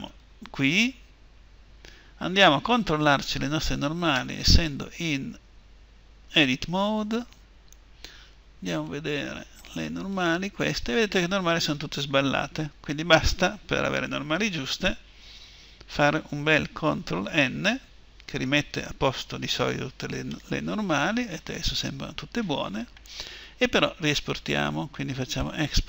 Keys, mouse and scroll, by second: 0.0 Return, 1.3-3.5 middle drag, 5.1 Tab, 9.9-17.1 drag, 17.1 ctrl+n, 20.1-22.1 middle drag.